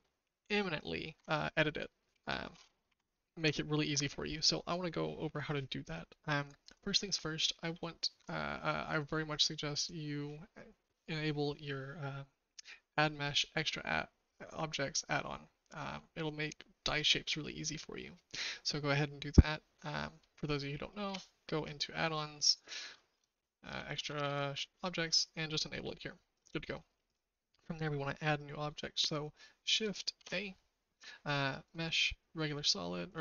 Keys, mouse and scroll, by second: 1.1 Tab, 2.1 BackSpace, 2.8 KP_4, 3.4 Tab, 8.9 click, 30.1 shift+a.